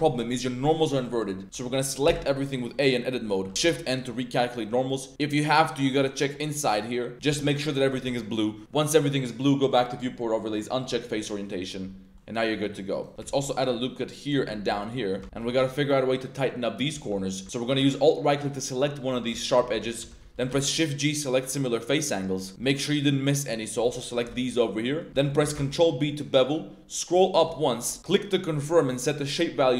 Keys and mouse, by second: 1.4 Tab, 1.7 click, 2.8 click, 2.8 a, 3.6 shift+n, 6.3 click, 7.3 Tab, 8.3 middle click, 9.7-11.0 drag, 11.2-11.7 middle drag, 12.1-12.4 middle drag, 12.9 click, 13.1 Tab, 13.2 ctrl+r, 14.6 ctrl+r, 15.1 click, 15.2 Tab, 15.4 shift+click, 16.6 click, 16.9 2, 17.4 alt+click, 19.3 z, 19.6 z, 20.0 z, 20.4 shift+g, 22.1-22.5 middle drag, 23.0-23.6 middle drag, 24.1 alt+shift+click, 24.5-25.0 middle drag, 25.1 z, 25.1 middle click, 25.5 ctrl+shift+b, 27.2 shift+click, 29.2 click.